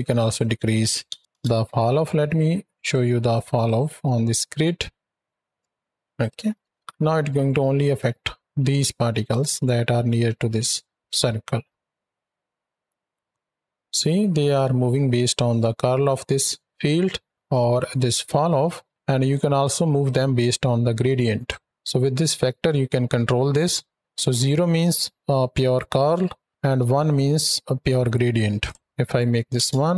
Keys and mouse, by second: 0.0-1.2 drag, 2.7 ctrl+shift+click, 3.5 ctrl+shift+click, 6.0 click, 6.3 x, 6.6 shift+Right, 6.6 shift+Left, 9.2 space, 12.0 ctrl+click, 19.9-21.3 drag, 21.6 space, 28.5-29.5 drag.